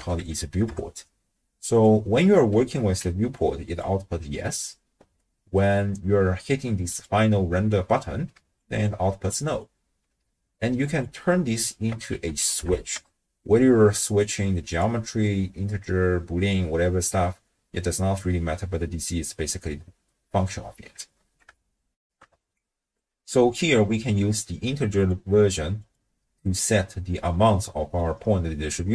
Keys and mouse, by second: 3.0-4.1 d, 3.4 click, 7.0-8.1 drag, 8.3-9.9 d, 8.6 click, 9.3 click, 10.2 d, 11.0-14.3 drag, 14.7-17.1 drag, 22.0 ctrl+alt+shift+w, 22.2 ctrl+alt+shift+q, 25.0-25.9 drag, 26.7 middle click, 27.7 middle click.